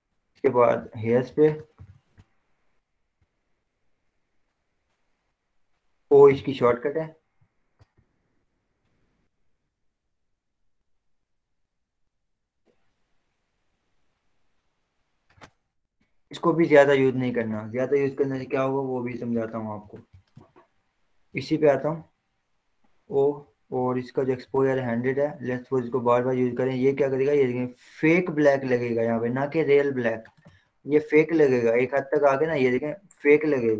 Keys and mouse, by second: 0.1 h, 1.2 click, 2.0 ctrl+-, 2.9 click, 3.4 b, 6.6 o, 8.4 ], 8.5 ], 9.0 ], 9.1 ], 9.8 click, 10.8-16.2 drag, 16.2 ctrl+0, 18.2 click, 20.6 z, 22.2-31.0 drag, 31.0 ctrl+0, 32.5 click.